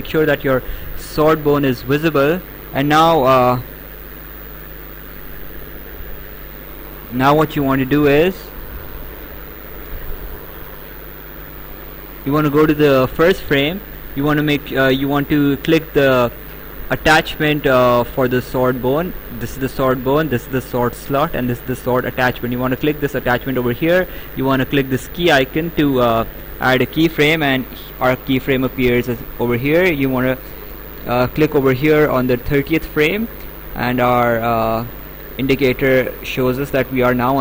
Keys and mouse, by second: 1.2 click, 2.2 right click, 4.8 click, 6.9 click, 11.1 Delete, 11.9 click, 16.2 click, 18.5 click, 20.7 click, 26.6 click, 30.9 click.